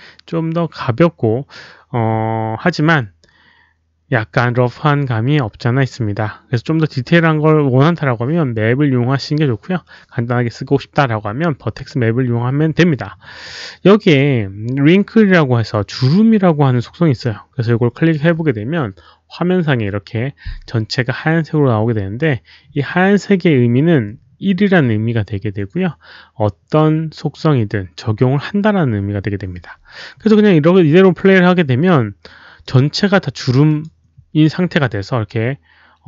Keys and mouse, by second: 17.9 alt+click, 31.3 click, 32.6 click, 33.6 click.